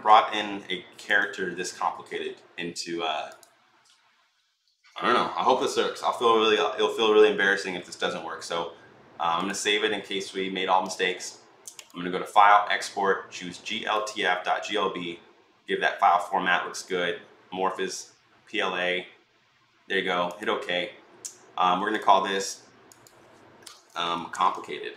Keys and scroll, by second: 23.5-24.9 typing, 23.8 Right.